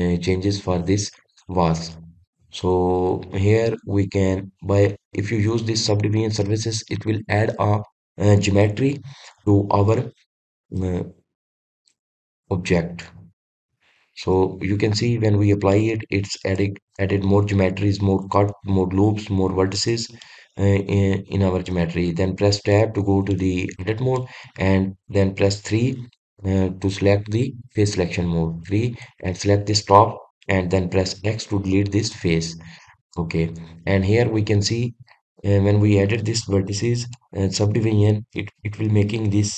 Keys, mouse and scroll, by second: 11.5-14.5 middle drag, 14.5-15.0 scroll up 2, 15.0-16.3 scroll down 1, 16.3-23.3 middle drag, 23.3 Tab, 23.9-29.6 middle drag, 29.6 click, 33.4-35.3 middle drag, 35.3-35.8 scroll up 1, 35.8-36.4 scroll down 1, 36.4-37.0 scroll up 1, 37.0-39.5 middle drag.